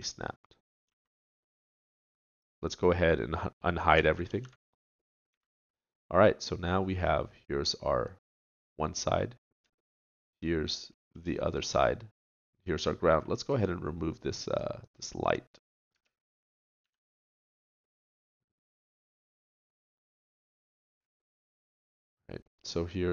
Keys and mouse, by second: 0.9 a, 1.7 click, 4.2 alt+h, 5.3 a, 13.5-15.9 drag, 15.9 Tab, 16.8 x, 17.8 middle click, 22.9 middle click.